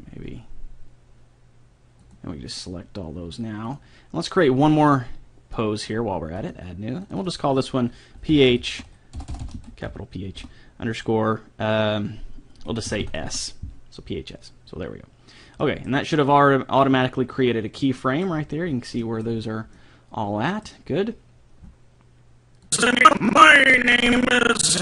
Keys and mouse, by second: 0.1 g, 3.7-6.5 drag, 7.1-9.2 drag, 9.3 BackSpace, 9.5 BackSpace, 13.0 s, 15.6-17.5 middle drag, 18.1-21.2 middle drag, 22.8-24.4 drag.